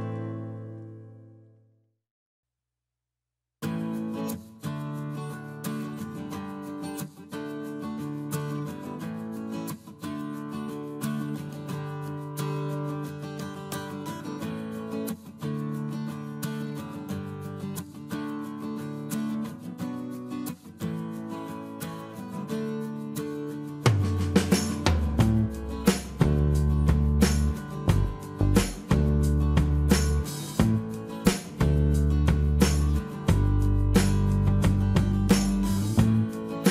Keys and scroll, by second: 0.7 m, 2.4 space, 2.5 Escape, 4.4 space, 8.7 space, 8.7 Escape, 10.2 m, 12.8 space, 12.9 Escape, 13.3 space, 26.1 space, 30.3 m, 34.1 space, 35.6 space, 35.6 Escape.